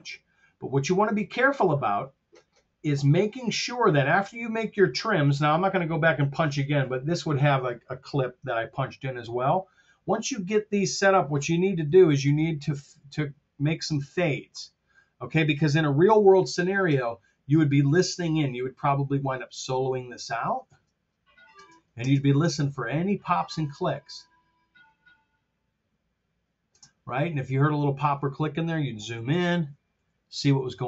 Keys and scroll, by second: 12.1 super+f, 16.8 F7, 20.6 space, 26.7 space, 29.2 t.